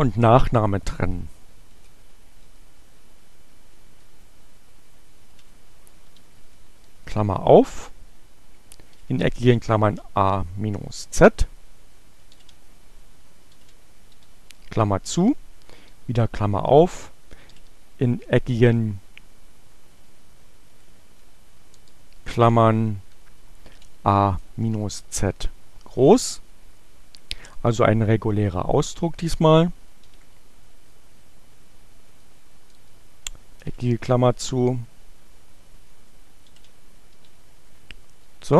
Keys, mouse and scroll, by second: 1.1 Up, 1.5 Up, 2.1 Left, 4.0 Delete, 6.2 shift+8, 9.1 alt+8, 9.3-10.6 typing, 11.8 alt+9, 14.1 shift+9, 14.7 shift+8, 16.9 alt+8, 19.2 BackSpace, 21.8 BackSpace, 22.3 Right, 23.4-25.4 typing, 29.7 shift+9, 32.2 BackSpace, 33.2 alt+9, 37.3 shift+9, 37.5 Right, 37.8 Delete.